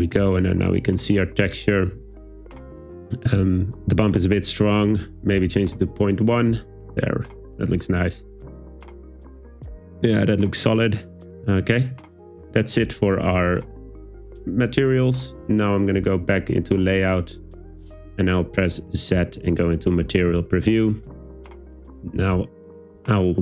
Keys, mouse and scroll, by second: 4.5-5.9 drag, 17.0 click, 18.8 `, 18.8 z.